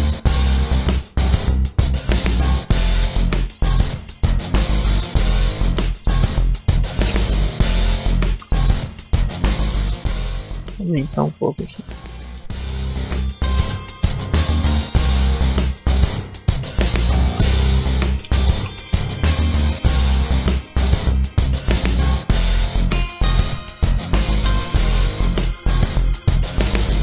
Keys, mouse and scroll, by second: 0.0 middle click, 0.9 middle click, 2.5 Tab, 3.1 a, 3.4 middle click, 4.2 scroll up 2, 4.7 scroll down 1, 5.5 middle click, 7.7 click, 7.7 middle click, 8.1 z, 8.3 shift+middle click, 10.8 middle click, 11.1-13.5 typing, 13.2 scroll up 1, 16.1 click, 17.1 z, 17.3 middle click, 18.1 KP_5, 18.4 a, 18.8 scroll down 3, 19.0 shift+middle click, 19.3 middle click, 22.4 middle click, 23.1 z, 24.3 ctrl+z, 24.6 ctrl+z, 25.0 shift+middle click, 26.2 click.